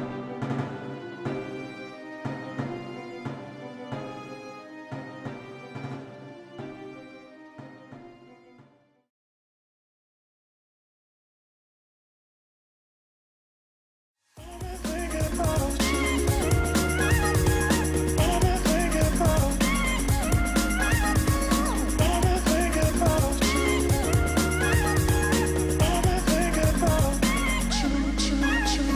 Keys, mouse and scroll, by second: 2.2 shift+click.